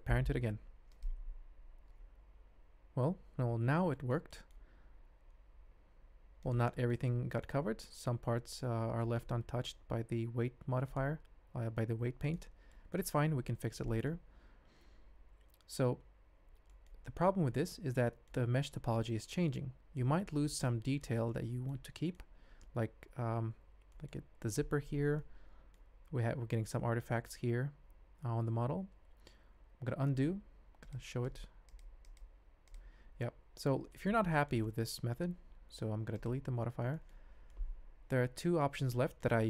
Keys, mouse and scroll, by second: 0.1 ctrl+p, 3.9 shift+drag, 4.1 shift+middle click, 4.3 middle click, 4.8 ctrl+Tab, 5.5 g, 6.7 shift+middle click, 7.2 ctrl+middle drag, 9.0 middle click, 9.7 g, 11.5 g, 12.7 shift+drag, 13.8 middle drag, 15.1 ctrl+z, 16.7 shift+drag, 17.0 middle click, 17.5-18.2 ctrl+middle drag, 18.7-19.1 ctrl+middle drag, 19.6-19.9 ctrl+middle drag, 20.3 shift+middle click, 20.6-21.0 ctrl+middle drag, 21.3-21.8 middle drag, 23.9 middle click, 25.2-25.7 middle drag, 27.8 ctrl+z, 28.6 ctrl+z, 29.3 ctrl+z, 30.8 click, 31.3 click, 31.7 click, 32.1 click, 32.7 click, 33.9 ctrl+middle click, 34.3 shift+middle drag, 34.6-35.2 middle drag, 36.1 click, 37.5-38.7 ctrl+middle drag, 38.9 ctrl+middle click.